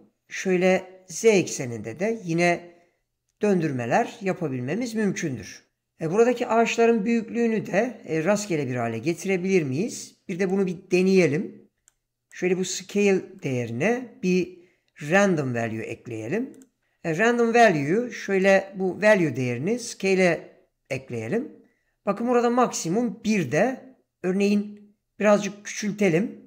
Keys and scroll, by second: 15.5 shift+a.